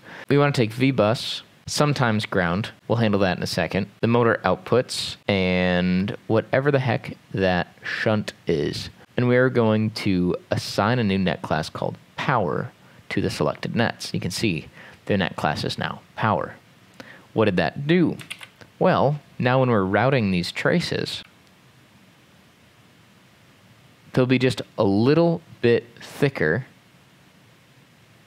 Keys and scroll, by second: 18.4 ctrl+s, 21.2 x.